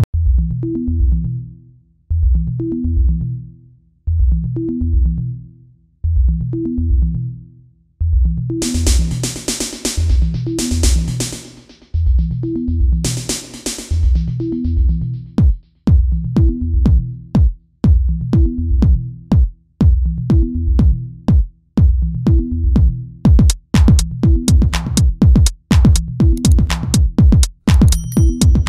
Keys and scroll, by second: 4.6 space, 13.6 space, 16.0 ctrl+z.